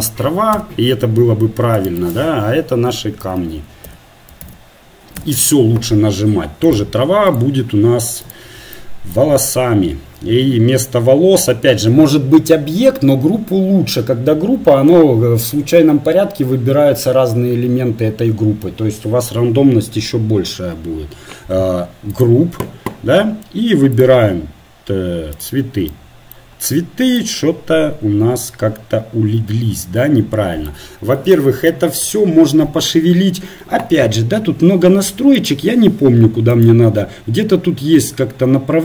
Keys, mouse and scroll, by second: 0.5 scroll up 1, 1.8-5.2 drag, 5.2 scroll up 1, 6.7-29.4 drag.